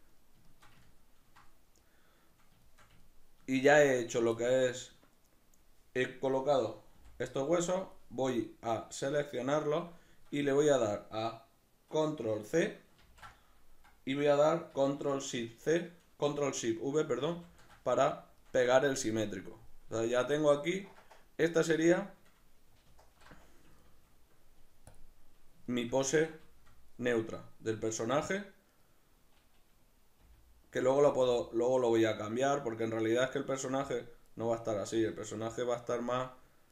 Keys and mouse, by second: 6.6-8.5 middle drag, 7.0 b, 13.0 ctrl+c, 17.3 ctrl+shift+v, 18.4 shift+middle click, 22.9 alt+q, 25.7-28.7 shift+middle drag, 28.7 right click, 30.2 g, 30.9 right click, 31.2 g, 34.0 click, 34.3 right click, 35.0 g, 36.0 click.